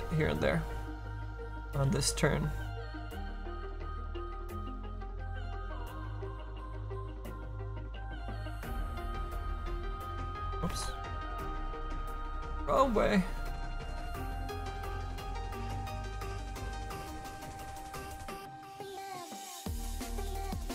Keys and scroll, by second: 4.3 s, 8.5 s, 10.6 ctrl+z, 15.8 ctrl+z.